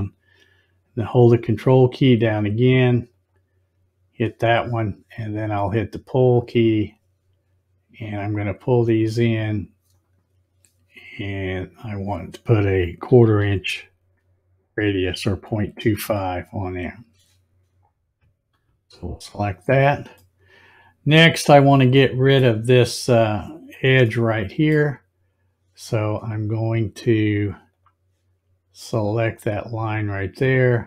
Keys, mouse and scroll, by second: 3.1 ctrl+click, 6.3 click, 8.7-11.4 drag, 18.5 click, 20.3-22.3 middle drag, 24.1-24.6 middle drag, 27.7 click, 29.9 click.